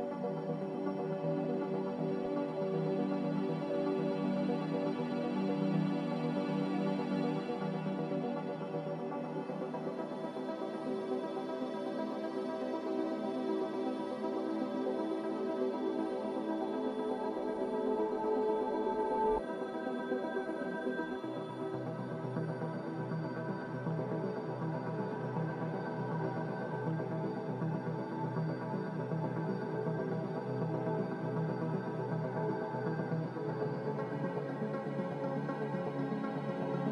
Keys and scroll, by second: 22.6 ctrl+z, 23.0 ctrl+z, 29.4-34.9 typing.